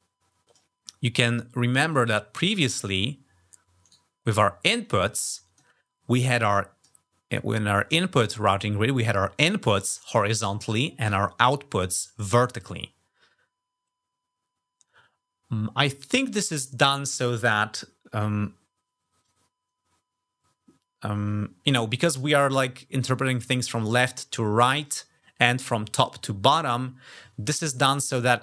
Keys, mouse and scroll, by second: 0.2 click, 1.7 click, 3.6 right click, 4.6 click, 6.1 click, 7.1 click, 16.4 click.